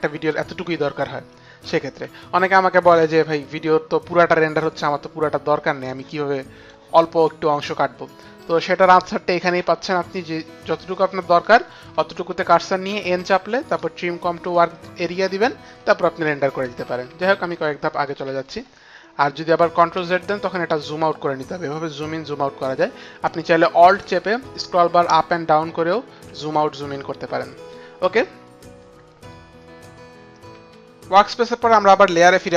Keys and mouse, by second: 1.8 ctrl+z, 2.8 ctrl+z, 5.8 ctrl+z, 5.8 click, 8.1 click, 12.6 n, 13.4 right click, 14.2 click, 16.8 ctrl+z, 17.2 ctrl+z, 20.5 click, 21.8 click.